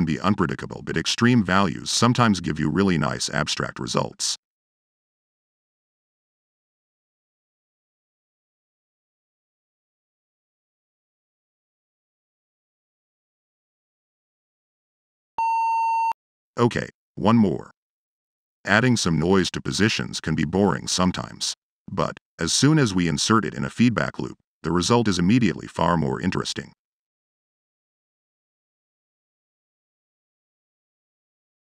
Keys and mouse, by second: 0.8-1.4 middle drag, 1.6-2.7 drag, 2.9 middle drag, 3.8-4.7 drag, 5.2-5.6 drag, 6.6-11.9 drag, 12.7 click, 17.6 click, 17.8 Tab, 18.2 f, 19.5 drag, 20.0 drag, 20.5-20.9 drag, 21.4 click, 22.5 click, 24.2-25.0 drag, 26.6-27.2 drag, 27.5-28.1 drag, 28.3 click, 29.5-31.7 drag.